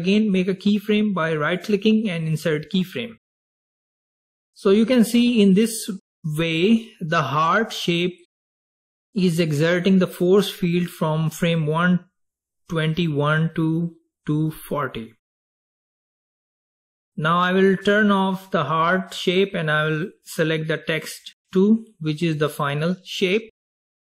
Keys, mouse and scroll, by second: 1.6 right click, 6.6-9.8 drag, 18.9 drag, 20.1 drag, 21.4 click, 22.7 click.